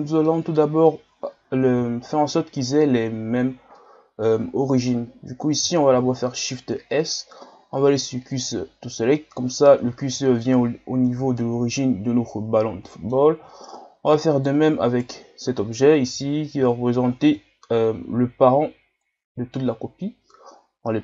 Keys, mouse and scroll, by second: 0.3-0.7 middle drag, 0.7-1.9 scroll up 1, 1.9 shift+scroll down 1, 3.1 ctrl+scroll down 1, 3.7-5.9 middle drag, 5.9 shift+s, 9.9-10.8 shift+scroll up 1, 10.8-11.3 scroll up 1, 11.3 ctrl+scroll down 2, 12.9-14.3 middle drag, 14.3 right click, 14.9 right click, 16.1 KP_1, 16.8 shift+scroll up 3, 17.2 Tab, 18.0 a, 19.0-21.0 drag.